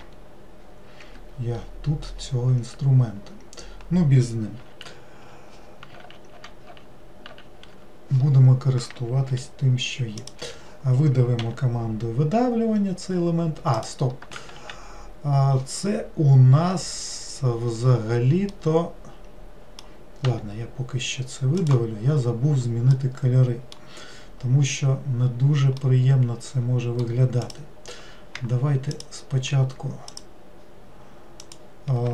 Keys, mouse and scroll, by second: 6.0 ctrl+z, 9.3 n, 10.2 click, 10.4 n, 18.5-20.2 middle drag, 20.2 e, 22.0 scroll down 1, 23.0-24.1 middle drag, 24.1 scroll down 1, 25.8-27.4 middle drag, 27.4 click, 28.9 shift+click, 30.1 shift+click, 31.4 shift+click.